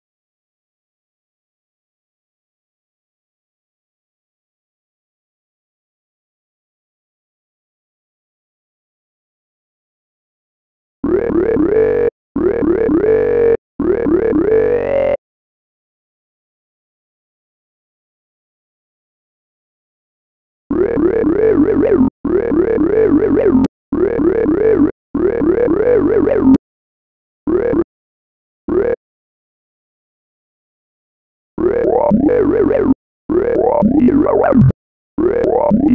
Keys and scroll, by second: 1.5 b, 3.7 b, 8.1 super+d, 10.2 space, 11.4 space, 12.8 space, 14.4 space, 30.8 space, 32.2 space, 34.3 space.